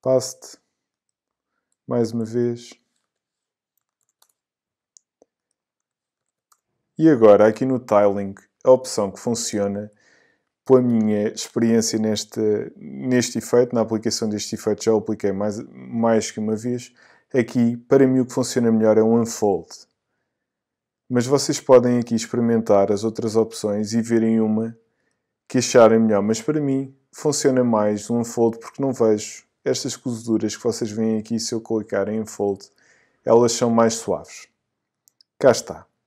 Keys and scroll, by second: 0.5 Return, 2.3 alt+v, 3.0 alt+BackSpace, 3.8 super+BackSpace, 4.0 super+v, 4.2 super+Return, 5.1 Return, 6.2 super+v, 6.5 super+Return, 7.3 Return.